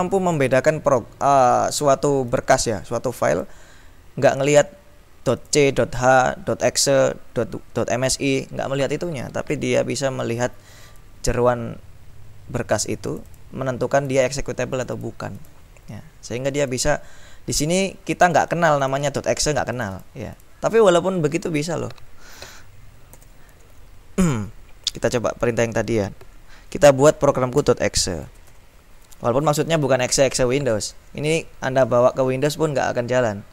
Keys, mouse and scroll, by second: 0.3 click, 2.3 click, 3.3 click, 5.5 click, 13.3-13.9 scroll up 2, 14.1 click, 14.8-16.1 drag, 16.5 click, 18.3-19.4 drag, 19.8-21.1 drag, 23.3 ctrl+l, 23.8 ctrl+Up, 24.5 Up, 27.4-29.1 typing.